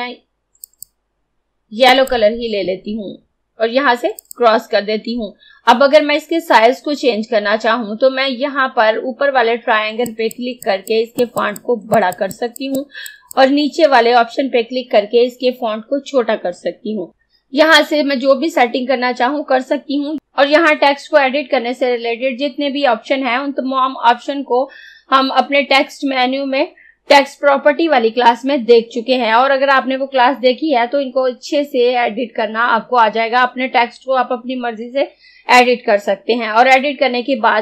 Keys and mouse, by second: 0.7 click, 4.2 click, 10.1 click.